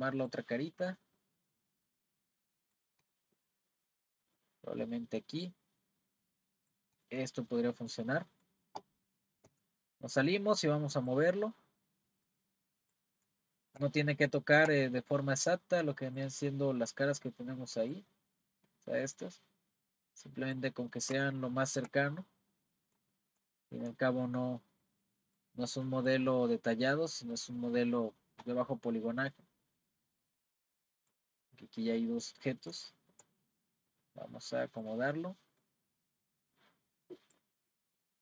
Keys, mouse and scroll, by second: 0.2 click, 1.2 click, 3.0 click, 3.4 middle click, 4.2 click, 5.1 click, 7.0 click, 7.3 middle click, 7.9-8.2 scroll down 1, 8.2-9.5 middle drag, 9.5 Tab, 10.6 click, 12.3 click, 13.5-13.9 shift+middle drag, 13.9-14.4 scroll up 4, 14.4-15.5 shift+middle drag, 15.5 click, 17.3 click, 18.1-19.2 middle drag, 19.2 click, 20.8-21.3 scroll up 5, 21.3-22.1 shift+middle drag, 22.1-22.5 scroll up 3, 22.5-23.8 middle drag, 23.8 scroll up 1, 23.9-24.8 middle drag, 24.8 click, 26.4-29.1 middle drag, 29.1 click, 31.5-32.0 scroll down 2, 32.0-33.9 middle drag, 33.9-35.1 drag, 35.1-36.5 middle drag, 36.5 click.